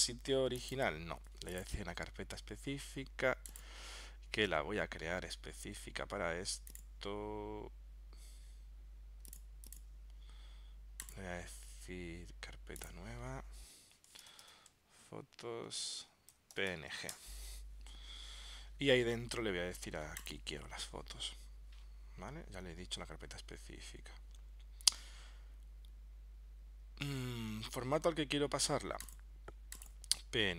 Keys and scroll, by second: 14.2 shift+f, 16.2-17.3 typing.